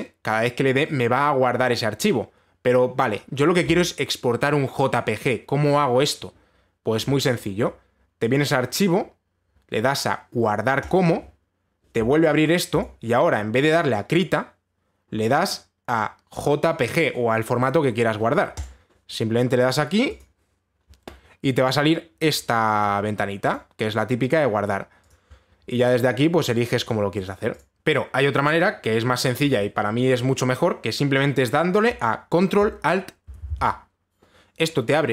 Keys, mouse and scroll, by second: 0.0 ctrl+s, 8.9 click, 11.4 click, 13.4 click, 19.2 click, 20.8 click, 23.5 click, 24.1 click, 25.7 click, 27.1 click, 27.5 click, 27.7 click, 32.5 click, 33.8 ctrl+alt+a.